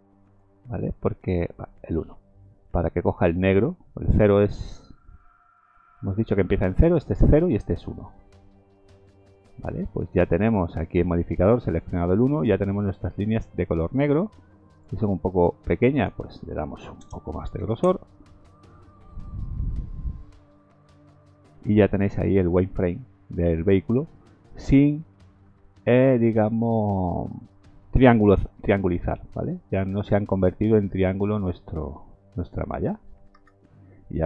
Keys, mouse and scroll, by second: 2.7-4.0 scroll up 4, 5.9 click, 10.8 click, 14.7 click, 21.6 scroll down 3, 22.8 middle click, 22.8-23.3 scroll down 1, 23.5 scroll up 3, 23.8 middle click, 24.6 scroll up 3, 25.1 middle click, 25.9 middle click, 26.6 middle click, 27.1-27.6 scroll down 3, 27.6 middle click, 28.6 shift+middle click, 28.7 shift+middle click, 29.1 middle click, 29.5-30.1 scroll up 2, 30.2 middle click, 30.2-30.6 scroll up 1, 31.4 middle click, 31.8-32.5 scroll down 3, 32.5 middle click, 33.3 KP_0.